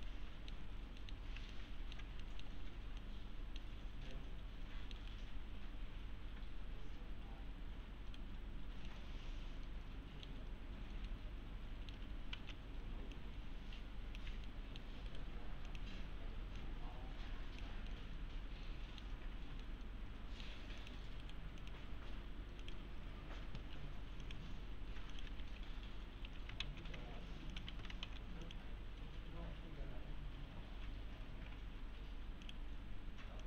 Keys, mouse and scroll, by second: 0.1-0.7 middle click, 0.6 scroll down 1, 1.0 middle click, 1.6-2.2 alt+middle click, 2.6-2.9 scroll up 1, 3.0-3.6 middle click, 3.8 scroll down 1, 4.1-5.1 middle click, 5.1-7.6 right click, 8.5-8.9 scroll up 1, 8.9-10.4 middle click, 12.4 alt+z, 13.2-14.4 alt+click, 14.5-15.4 middle click, 15.1 right click, 15.7 click, 17.9-19.1 middle click, 20.8 click, 21.2 right click, 21.6 click, 25.1 click, 25.4 F3, 26.6 alt+x, 27.5 click, 27.7 ctrl+a, 28.1 alt+x, 28.4 click, 32.5 click.